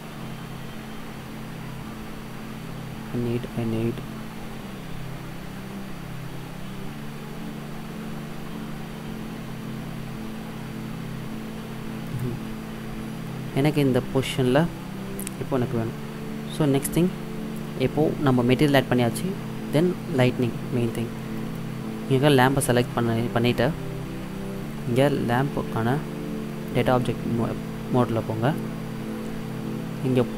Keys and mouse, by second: 13.0-18.2 drag, 21.4-23.3 middle drag, 26.8 click.